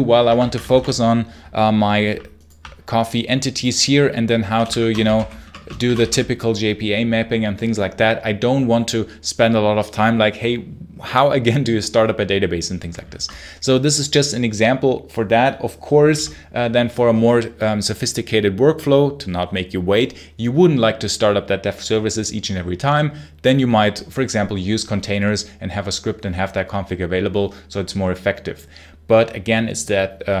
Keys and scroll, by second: 0.1 Escape, 0.2 space, 0.3 l, 0.5 space, 0.6 l, 4.1-5.7 typing, 13.0 Escape.